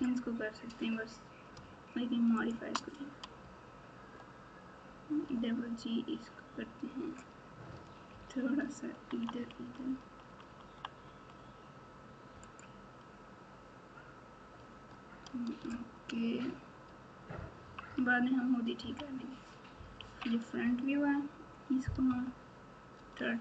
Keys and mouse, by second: 2.4 shift+click, 3.4 g, 16.1 Tab, 16.8 Tab, 17.6 KP_6, 17.8 KP_6, 18.8 KP_3, 20.0 KP_1, 20.5 Tab, 22.0 KP_8, 22.9 Tab.